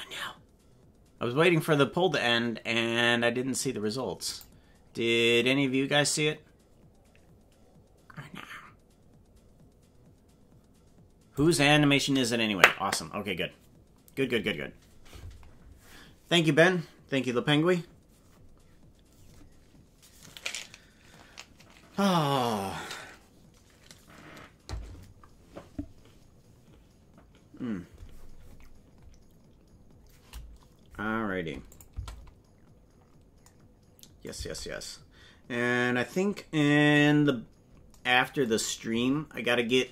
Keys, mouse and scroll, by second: 31.7 click, 32.0 space, 34.3 space, 37.1-37.6 scroll up 5.